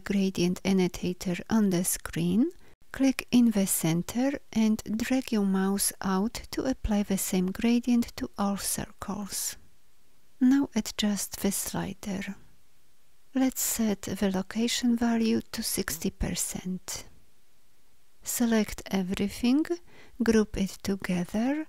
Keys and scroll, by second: 18.3 ctrl+a, 20.4 ctrl+g.